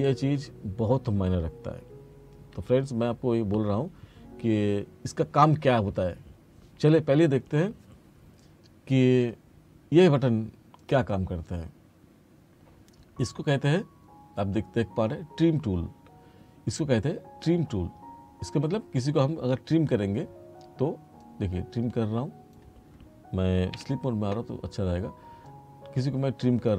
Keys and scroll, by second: 23.8 F2.